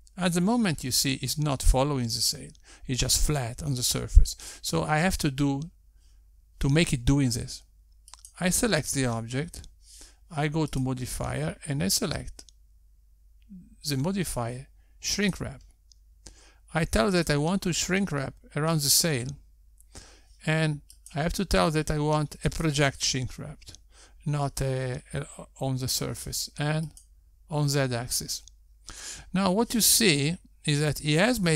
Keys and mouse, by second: 9.8 click, 12.7 click, 19.1 click, 22.9 click, 28.9 click.